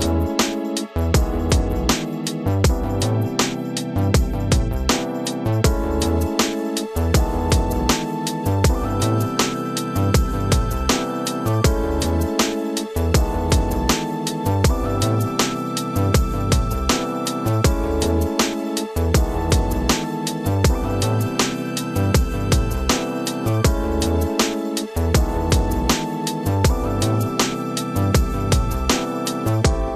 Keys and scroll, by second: 0.1 Return, 2.5 Delete, 3.7 ctrl+space, 4.5 space, 5.8 ctrl+KP_Subtract.